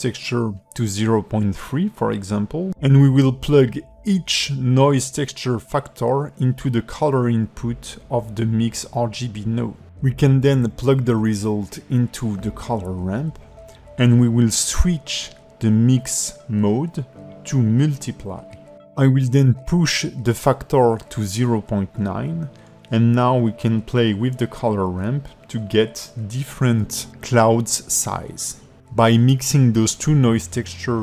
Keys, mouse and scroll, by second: 3.4 click, 3.7 ctrl+shift+click, 4.1 click, 6.0 click, 8.2 click, 10.2 click, 13.1 click, 16.6 click, 17.2 click, 25.6 click, 29.9 click.